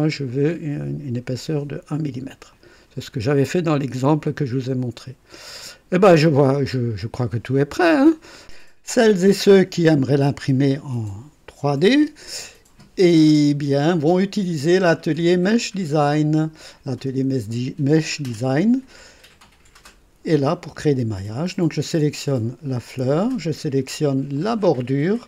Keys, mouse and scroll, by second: 1.4 scroll up 2, 2.5 click, 3.9 click, 5.5 click, 6.6 right click, 8.0 click, 16.2 click, 21.7 click, 24.3 ctrl+click.